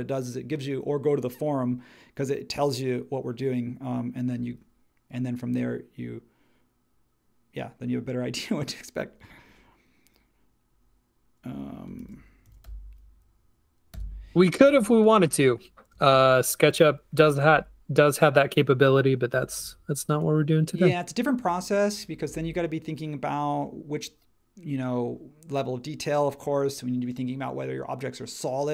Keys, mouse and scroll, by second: 11.7-13.1 typing, 13.9 Return, 15.9 space.